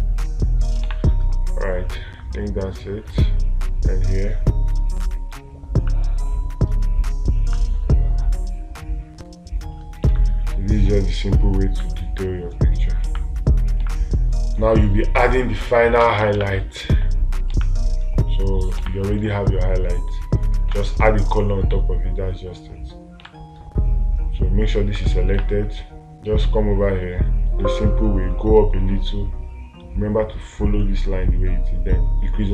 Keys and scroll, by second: 1.3 space, 10.6 space, 14.3 space, 16.8 space, 23.7 space.